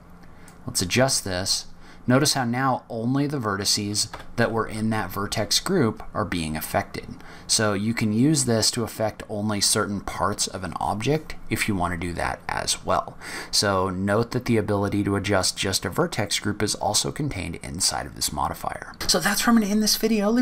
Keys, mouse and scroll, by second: 0.9 g, 4.6 s.